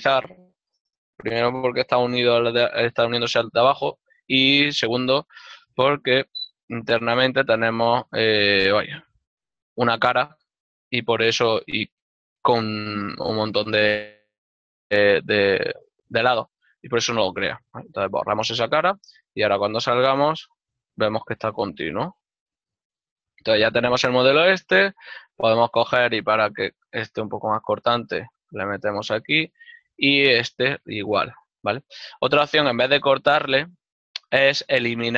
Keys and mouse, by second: 5.7 click, 7.9 x, 9.2 z, 18.3 click, 20.4 z, 21.1 click, 23.3 ctrl+middle click, 23.9 middle click, 26.2 ctrl+middle click, 28.9 click, 32.2 ctrl+r.